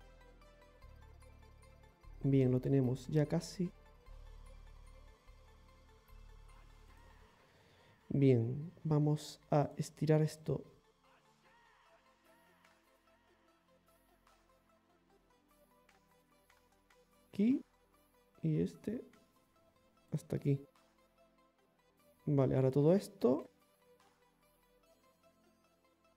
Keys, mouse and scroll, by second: 0.2 scroll down 1, 0.6 middle click, 1.0 scroll down 1, 5.7 shift+middle click, 6.5 click, 6.5 right click, 6.5 g, 9.7 right click, 10.5 ctrl+shift+right click, 12.2 r, 13.7 ctrl+z, 14.7 e, 17.2 e, 20.4 scroll down 1, 20.5 middle click, 21.7 middle click, 21.9 middle click, 22.0 scroll up 1, 22.9 right click, 23.4 shift+right click, 23.8 shift+right click, 24.6 shift+right click, 25.0 right click, 25.5 right click, 25.9 right click.